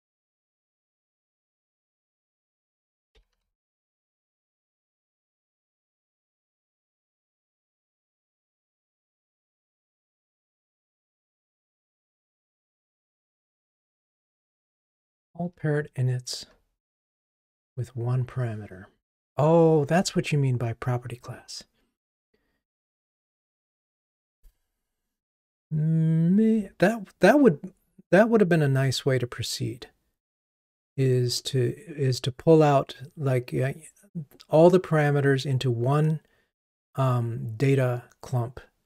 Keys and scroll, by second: 1.5 super+c, 3.4 super+v.